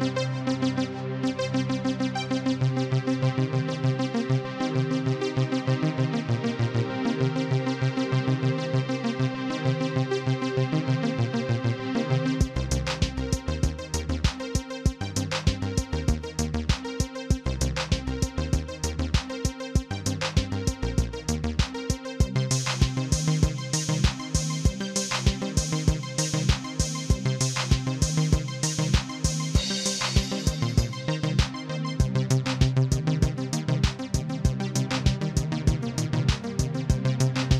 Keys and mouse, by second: 0.8 click, 1.7 a, 2.6 click, 3.2 click, 3.5 x, 4.1 click, 8.8 KP_Add, 9.7 click, 10.9 click, 11.8 click, 12.7 click, 14.1 click, 15.6 click, 16.7 click, 18.3 click, 19.4 KP_Add, 19.5 KP_Add, 19.6 KP_Add, 20.1 click, 21.8 click, 22.6 click, 24.6 click, 26.0 click, 27.4 click, 28.7 click, 30.6 click, 33.0 click, 35.4 click, 36.5 click.